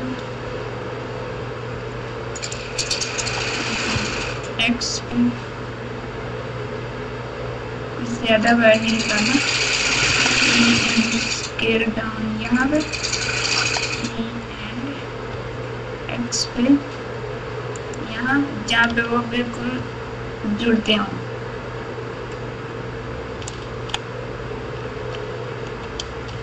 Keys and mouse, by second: 3.2 e, 10.0 e, 13.6 e, 18.8 g, 26.2 Tab.